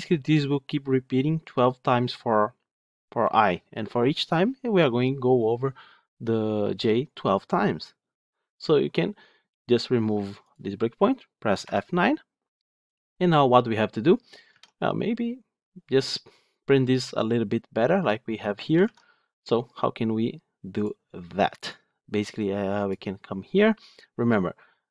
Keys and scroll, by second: 3.5 F8, 11.6 F9.